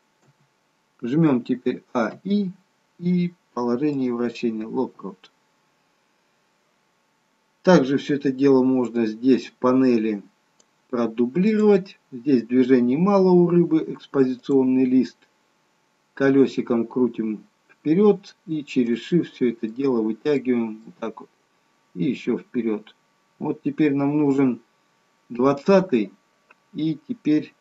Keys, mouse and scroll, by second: 0.2 KP_7, 1.8 a, 2.2 i, 8.9 click, 11.5 click, 17.3-18.4 scroll up 1, 18.4-19.3 scroll up 9, 19.3 shift+middle click, 19.3-20.4 scroll up 7, 20.4 shift+middle click, 22.5-23.5 scroll up 1, 23.5-25.5 scroll up 3.